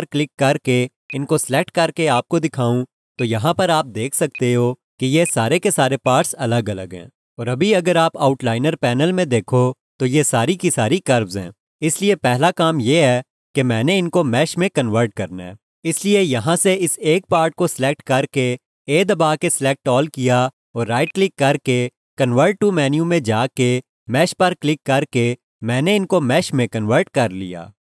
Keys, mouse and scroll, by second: 17.3 click, 21.0 right click, 25.2 click.